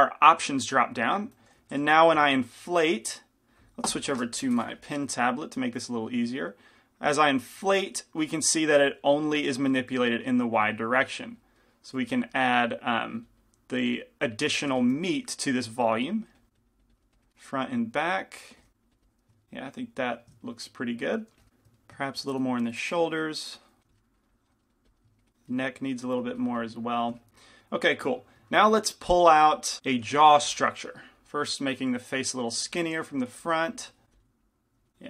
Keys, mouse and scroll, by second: 1.8 f, 2.1-5.6 drag, 2.4 shift+f, 6.1 f, 7.1-13.9 drag, 7.1 middle click, 11.0-13.9 middle drag, 12.2 f, 14.9 f, 17.6-20.4 drag, 17.6-22.6 middle drag, 18.7 f, 21.5 f, 23.9 click, 23.9 f, 24.2 click, 25.1-28.8 drag, 27.4-30.4 middle drag, 30.4 g, 30.4 f, 32.0 click, 32.3 middle click, 34.1 click, 34.1 f.